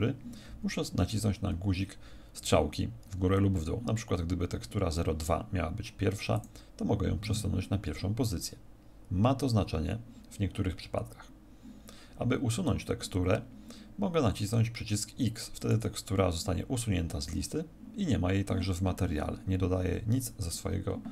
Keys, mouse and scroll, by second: 6.3 click, 7.2 click, 15.6 click.